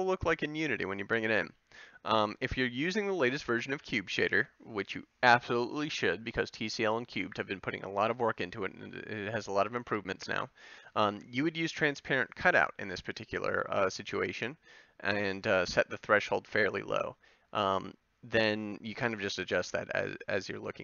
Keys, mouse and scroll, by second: 0.5-4.6 middle drag.